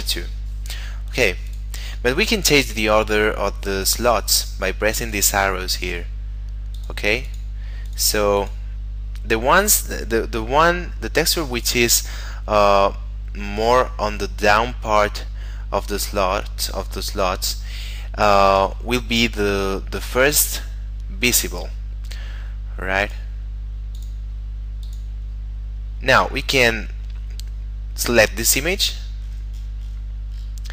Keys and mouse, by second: 0.0 Return, 1.5 click, 23.0 click.